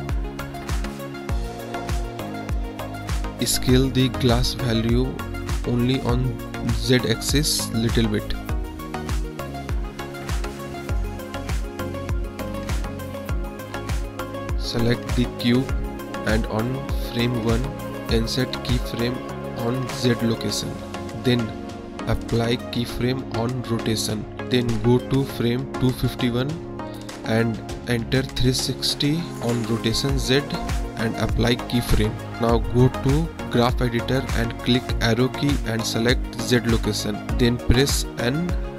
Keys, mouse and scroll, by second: 4.1 click, 4.7 click, 8.0 click, 9.3 click, 10.7 click, 14.0 middle click, 14.6 click, 15.7-16.4 drag, 17.5-19.7 right drag, 21.0-21.4 right drag, 22.6 click, 23.6 Right, 25.1 click, 26.4 click, 27.5 click, 28.0 space, 29.3 space, 30.2-30.8 drag, 31.1-31.6 drag, 32.6 click, 34.1 click, 35.1 click, 35.5 click, 36.7 click, 36.9 click, 38.2-38.7 drag.